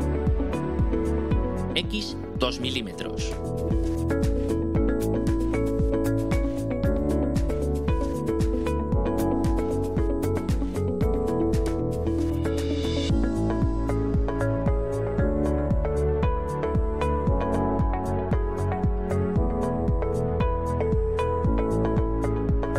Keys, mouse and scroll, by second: 3.9 2, 4.5 Return, 7.3-8.6 drag, 10.1-11.5 drag, 12.7-13.5 drag, 14.1 click, 15.4 click, 16.8 click, 19.6 click.